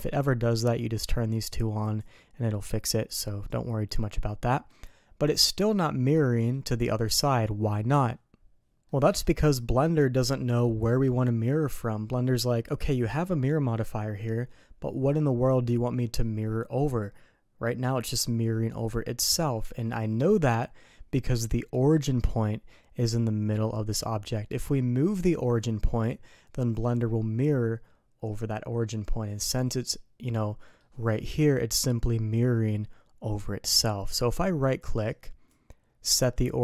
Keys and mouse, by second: 1.8 click, 3.0 click, 3.9-4.6 middle drag, 5.3 middle click, 6.3 middle click, 8.8-9.2 middle drag, 20.5 middle click, 29.5-29.8 middle drag, 30.6 middle click, 35.1-36.6 right drag.